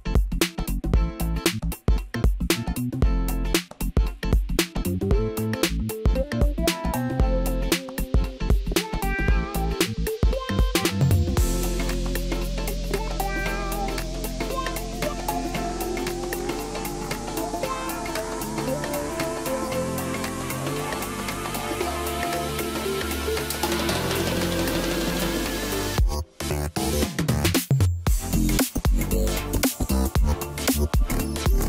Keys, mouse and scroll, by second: 0.4-1.9 middle drag, 1.9 ctrl+b, 6.6-9.4 middle drag, 9.4-10.7 drag, 10.7 scroll down 1, 11.0 middle click, 11.6 Tab, 11.9-12.6 middle drag, 12.6-13.3 right drag, 13.3-15.1 middle drag, 15.1 KP_1, 16.5 click, 17.3 click, 19.4-19.8 drag, 19.8-20.3 middle drag, 20.3-21.7 scroll up 1, 21.7 click, 22.5-25.3 middle drag, 25.3-26.3 drag, 26.3-27.2 middle drag, 27.2 Tab, 27.5 scroll up 3, 28.8 click, 28.9 click, 29.6 shift+click, 29.8 shift+click, 30.2 middle click, 31.2 scroll up 1.